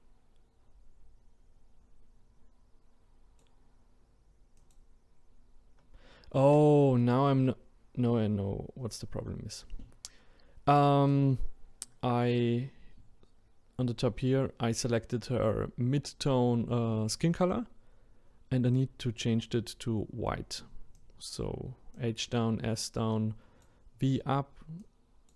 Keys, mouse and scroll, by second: 18.7 click.